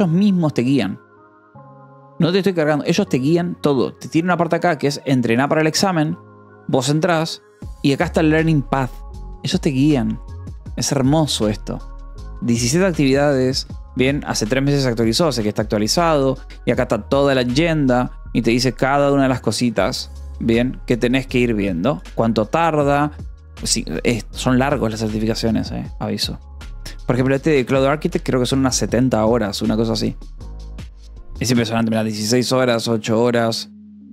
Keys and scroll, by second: 2.1 k, 9.9 ctrl+=.